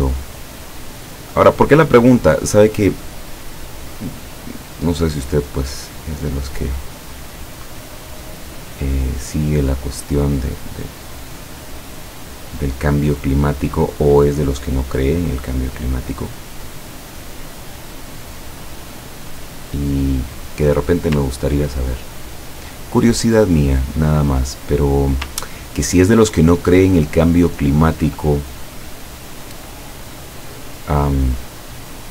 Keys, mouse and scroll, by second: 1.5 click, 5.4 click, 7.1-7.4 scroll down 2, 10.2-11.3 drag, 14.6 click, 15.6 click, 18.9 click, 20.4 click, 20.8 click, 21.4-22.1 ctrl+scroll down 4, 24.3 scroll up 2, 24.9-25.3 scroll down 2, 25.4-26.0 ctrl+scroll up 2, 26.2 ctrl+click, 27.7 ctrl+scroll down 2, 28.7 click, 29.1 click, 30.2-32.1 drag.